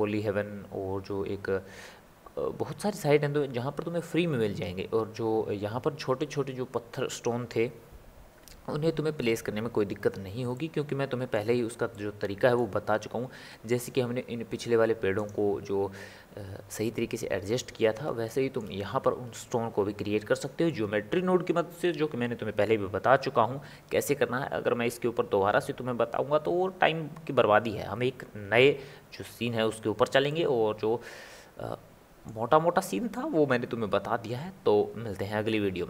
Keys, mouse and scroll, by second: 10.6-13.8 ctrl+middle drag, 13.8 click, 15.2 click, 18.3-21.4 shift+middle drag, 30.3-33.3 middle drag.